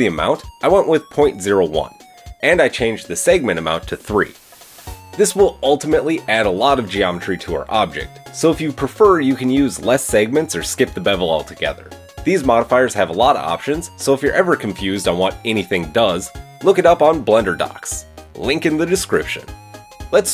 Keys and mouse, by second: 1.3-3.1 middle drag, 3.1-5.8 drag, 5.8 middle click, 6.5-13.5 shift+drag, 13.5-16.9 middle drag, 19.5-20.3 middle drag.